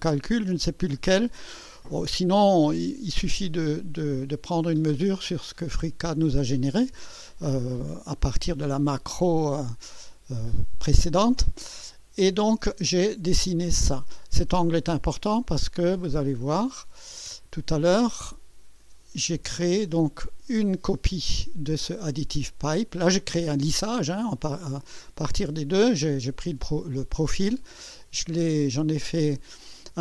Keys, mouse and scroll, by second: 3.1 click, 12.6 scroll down 2, 16.7 click, 18.8-19.3 scroll down 2, 19.7 scroll down 1.